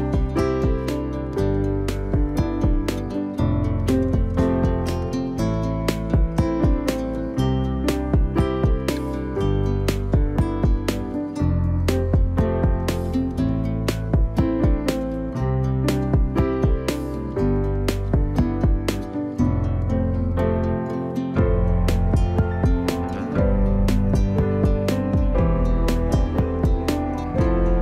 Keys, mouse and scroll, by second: 3.7-4.8 middle drag, 4.8 click, 5.3-5.6 scroll up 2, 5.9-7.1 shift+middle drag, 7.1 Tab, 9.0-10.4 drag, 13.4 w, 14.9 click, 16.8 click, 18.6 shift+click, 19.7-22.1 drag, 23.5 click, 24.6 shift+click, 25.8 j.